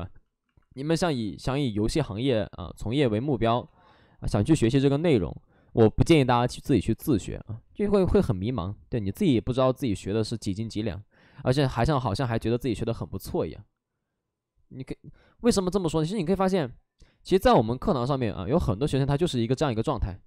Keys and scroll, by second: 1.0 space, 3.6 space, 4.5 b, 7.7 x, 7.9 space, 13.7 space, 16.9 ctrl+z, 17.8 alt+s, 18.0 alt+s.